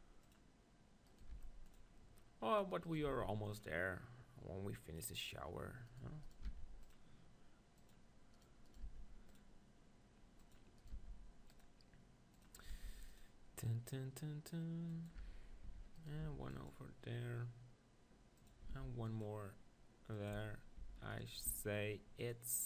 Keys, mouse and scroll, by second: 0.3 right click, 1.1-2.1 right drag, 1.5 ctrl+r, 2.2-4.5 middle drag, 3.1 ctrl+r, 4.5 click, 5.5 middle click, 6.4-9.9 drag, 7.9-9.8 right drag, 8.9 ctrl+r, 9.9 right click, 10.5-12.4 drag, 10.8-14.2 right drag, 10.9 ctrl+r, 12.7 ctrl+r, 14.2 click, 15.0-17.6 drag, 15.2 Tab, 15.7 Tab, 16.0 right click, 16.2 ctrl+r, 18.5-22.6 drag, 18.8 ctrl+r, 20.4 Tab, 20.8 Tab, 21.1-22.2 right drag, 21.5 ctrl+r.